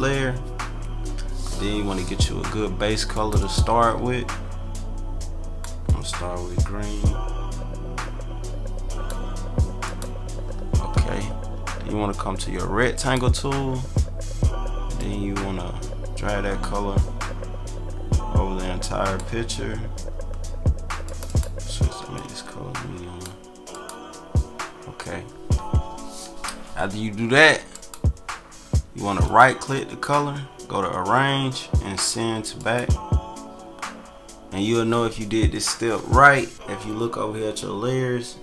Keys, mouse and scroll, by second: 3.1 click, 4.7 click, 5.8-9.7 drag, 9.8 click, 12.9 click, 15.0-16.3 drag, 18.7 click, 21.0 click, 22.1-23.3 drag, 23.7 click, 27.7 click, 32.5 click.